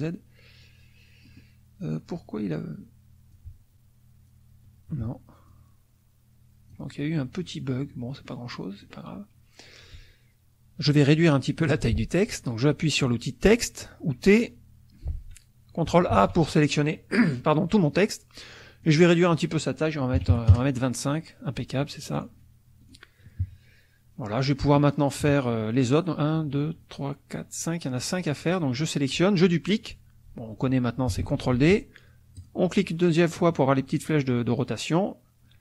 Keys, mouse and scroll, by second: 1.2 click, 3.3-4.5 ctrl+drag, 5.4-6.9 ctrl+drag, 7.4 middle click, 8.1 middle click, 8.5 middle click, 11.8 t, 16.1 ctrl+a, 18.8 click, 20.2 KP_2, 20.3 KP_5, 20.5 KP_Enter, 22.1 click, 22.8 click, 23.4 KP_Subtract, 24.2 middle click, 24.7-25.8 scroll up 1, 25.2 KP_Subtract, 25.8-28.4 scroll up 1, 28.4 click, 31.2 ctrl+d, 32.4 click, 34.5-35.6 drag.